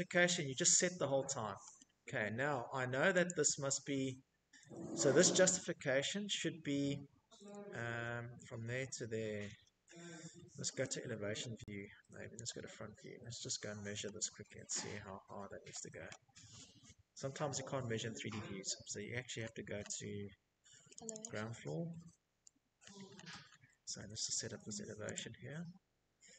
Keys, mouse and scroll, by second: 0.0 scroll, 1.1 click, 1.8 scroll, 2.0 middle click, 2.1 Escape, 2.4 Escape, 4.6 Escape, 7.2 Escape, 7.6 middle click, 7.7 scroll, 8.3-9.1 scroll, 10.3 click, 11.7-13.4 scroll, 17.2-18.3 scroll, 18.9 click, 19.1 click, 19.8-21.6 scroll, 21.6 Escape, 21.9 Escape, 22.0 click, 23.0 click, 23.0 scroll, 23.9 Escape, 24.1 middle click, 25.2 click, 25.4 click, 26.1 middle click.